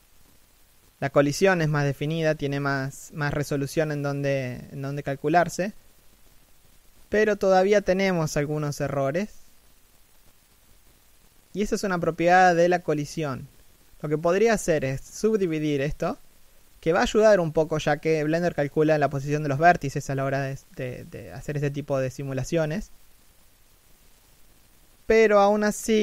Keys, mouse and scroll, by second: 4.2-5.3 scroll up 1, 5.6 shift+middle click, 6.4-6.9 scroll down 1, 6.9 middle click, 8.3-8.9 scroll up 1, 8.9 right click, 9.4 g, 10.1-11.0 scroll down 1, 11.0 middle click, 11.5-11.9 scroll up 1, 12.2 w, 14.1 scroll down 1, 14.4 middle click, 16.9 scroll up 1, 17.4 shift+middle click, 17.8 scroll up 1, 24.4-25.3 scroll up 1, 25.3 middle click.